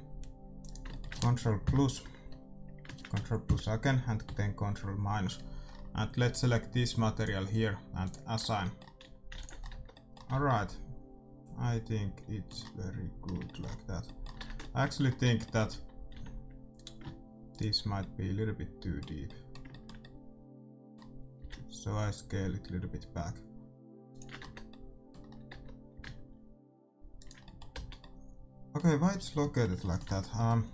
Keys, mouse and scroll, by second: 1.6 ctrl+KP_Add, 2.2 click, 2.2 middle click, 2.2 right click, 4.2 ctrl+KP_Subtract, 7.1-9.9 drag, 8.3-10.1 middle drag, 8.4 Tab, 9.0 a, 9.3 ctrl+s, 9.7 Tab, 10.2 a, 14.3 Tab, 15.2 Tab, 15.7 a, 16.1 a, 16.7-18.6 drag, 17.4-19.2 right drag, 17.9-21.7 middle drag, 21.3 s, 24.3 Tab, 24.5 middle click, 25.5 Tab, 25.9 s, 27.7 z, 30.0 Tab.